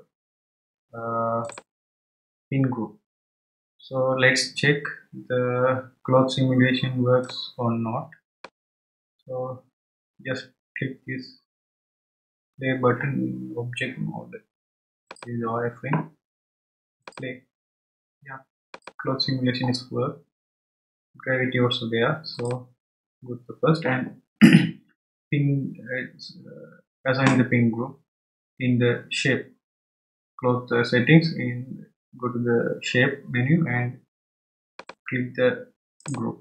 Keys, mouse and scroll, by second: 1.4-2.2 drag, 2.2-3.2 scroll down 1, 7.2-10.3 drag, 15.1 click, 17.0-21.7 drag, 22.3-25.3 drag, 34.7-36.4 drag.